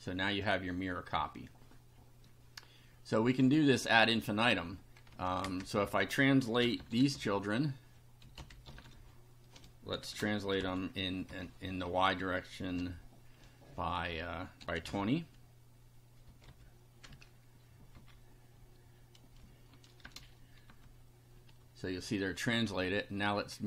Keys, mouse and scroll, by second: 3.5 click, 5.1 Home, 5.5 Return, 5.8 Up, 6.4-11.7 typing, 12.8 ,, 14.4-16.5 typing, 17.9 End, 20.0 shift+0, 20.7 F5, 23.3-23.6 drag.